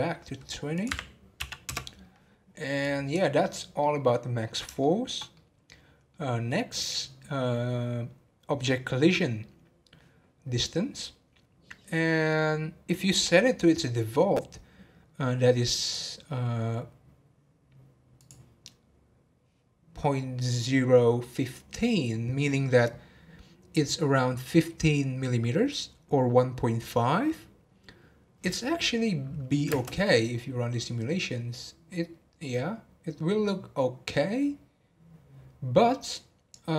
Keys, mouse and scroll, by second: 3.8-8.5 middle drag, 10.6 scroll down 1, 14.4-15.8 scroll down 1, 15.8-18.8 right drag, 29.7 space.